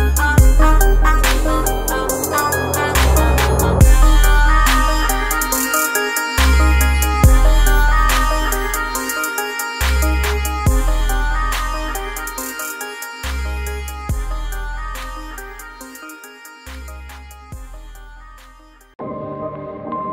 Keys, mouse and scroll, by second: 11.2 click.